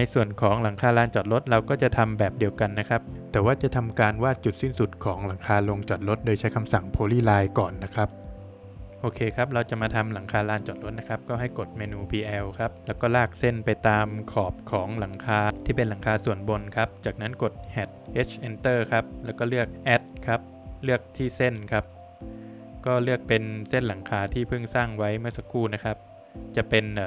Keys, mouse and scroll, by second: 1.7 scroll up 1, 2.3 space, 3.1 Escape, 3.1 middle click, 4.1 Escape, 4.2 click, 5.4 Escape, 8.4 space, 9.4 middle click, 10.8 click, 14.6 click, 14.7 space, 15.1 Escape, 15.4 scroll up 1, 15.7 space, 19.2 click.